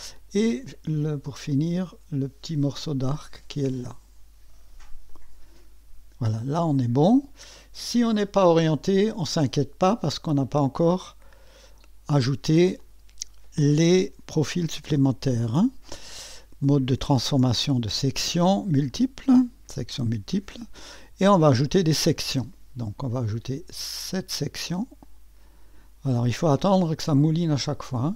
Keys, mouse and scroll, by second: 0.1 click, 2.8 click, 5.1 click, 7.3 scroll down 1, 11.0-12.4 drag, 12.8 click, 18.9 click, 19.8 click, 21.6 click, 25.0 click.